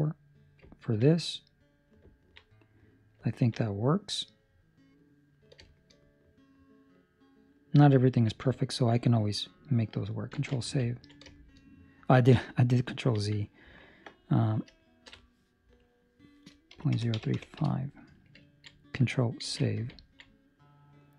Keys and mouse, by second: 0.7 middle click, 1.1 middle click, 2.0 ctrl+middle click, 2.4 middle click, 3.2 ctrl+middle click, 3.6 middle click, 5.6 shift+middle click, 5.9 middle click, 8.0 ctrl+middle click, 10.3 ctrl+z, 10.9 ctrl+middle click, 11.3 shift+middle click, 12.2 middle click, 13.1 ctrl+middle click, 15.7 click, 18.4 ctrl+middle click, 19.4 ctrl+s, 20.1 ctrl+middle click, 20.3 middle click.